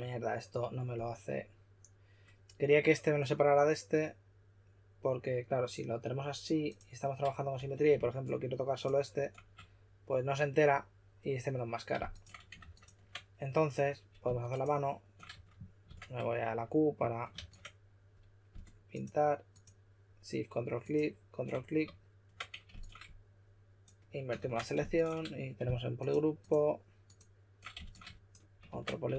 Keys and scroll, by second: 7.5 w, 12.5 super+a, 15.3 q, 17.3 super+a, 24.3 super+w, 28.6 super+w.